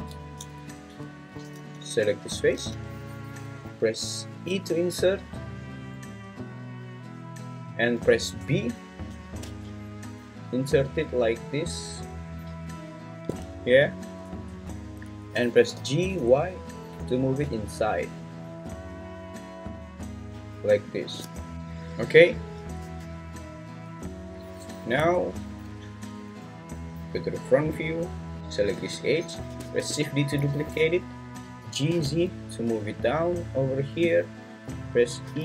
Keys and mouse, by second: 0.6 `, 1.6 alt+z, 2.6 alt+z, 4.4 i, 8.4 b, 15.7 g, 16.2 y, 20.9 shift+click, 22.8 Tab, 25.0 Tab, 25.5 `, 26.2 `, 28.9 `, 29.7 shift+d, 30.4 Escape, 31.6 g, 31.9 z, 35.3 e.